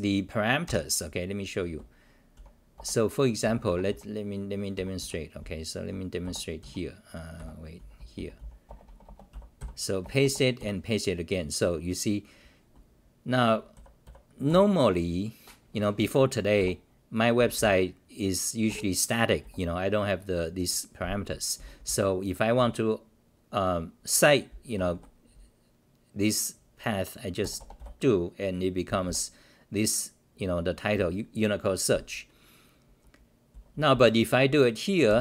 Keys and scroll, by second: 2.3-7.8 typing, 2.7 Return, 6.2 Return, 8.6 Return, 9.3 c, 9.6 k, 10.0 Return, 10.6 k, 11.2-12.3 scroll down 8, 13.7 ., 14.4 e, 16.3-17.5 typing, 18.7 ctrl+g, 19.4 r, 21.3-22.5 typing, 21.6 scroll down 8, 26.0 scroll, 28.8 c, 29.0 c, 30.9 t, 33.5 c, 33.7 c, 33.9 c.